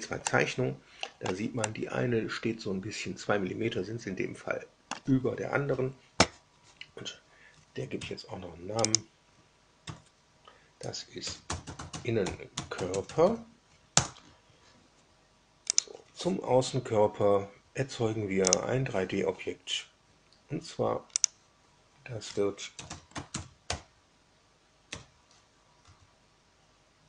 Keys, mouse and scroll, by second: 0.1-1.3 middle drag, 1.6-5.0 middle drag, 7.9 F2, 8.8 click, 9.7 F2, 11.0-13.6 typing, 13.9 Return, 15.7 click, 18.4 click, 21.1 drag, 22.4-25.7 typing.